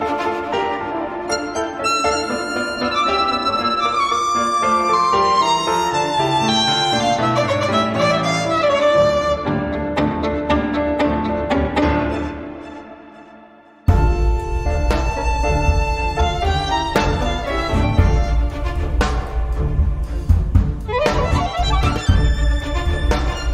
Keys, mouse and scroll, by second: 0.1-0.5 scroll up 2, 0.7-1.1 scroll up 2, 1.3-1.7 scroll up 2, 2.2-2.9 scroll down 2, 3.0-4.0 scroll up 3, 4.5-4.8 scroll up 1, 5.1-5.5 scroll down 1, 5.6-7.9 scroll down 14, 10.7 click, 11.6-12.2 scroll down 2, 12.8-14.1 drag, 14.8 click, 22.1 click, 22.9 click.